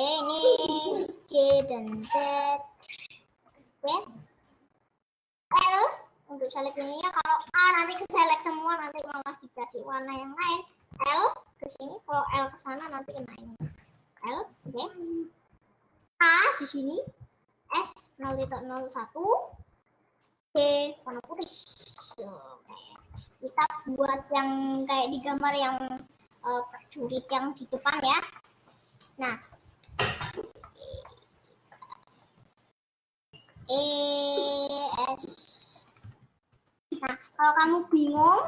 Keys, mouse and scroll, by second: 1.6 g, 5.5 l, 7.3 middle click, 7.5 a, 7.9 middle click, 8.5 scroll up 2, 8.9-10.2 middle drag, 10.2 click, 11.3 l, 12.4 l, 12.9 middle click, 13.4 ctrl+z, 16.2 a, 17.7 s, 20.5 g, 21.8 scroll up 1, 21.9 middle click, 22.8 click, 23.0 middle click, 23.5-24.1 scroll up 1, 27.6-29.9 middle drag, 29.9 scroll up 1, 30.8 middle click, 31.3 scroll down 1, 32.3 scroll up 1, 32.5 scroll down 1, 33.5 e, 35.1 s, 36.1 ctrl+z, 36.5 ctrl+z, 38.2 middle click.